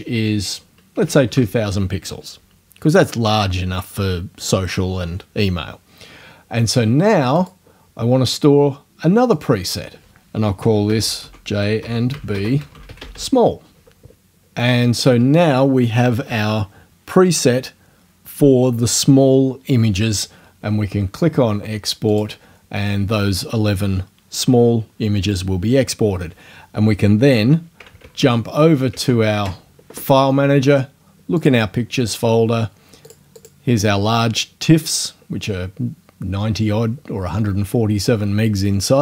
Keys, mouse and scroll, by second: 1.0 KP_2, 1.0 KP_0, 7.4 click, 9.4 click, 10.4-13.5 typing, 22.1 click, 28.0 alt+Tab, 31.4 click, 33.1 click, 33.4 click.